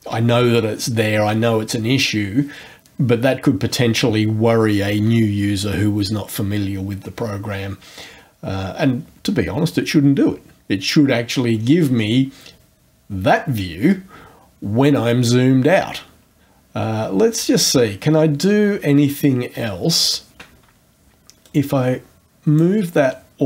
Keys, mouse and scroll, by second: 11.6-12.2 scroll up 2, 17.5-18.2 ctrl+scroll up 2, 18.5-19.0 ctrl+scroll down 2, 19.3 ctrl+scroll up 2, 19.8 ctrl+scroll up 2, 21.4-22.8 drag.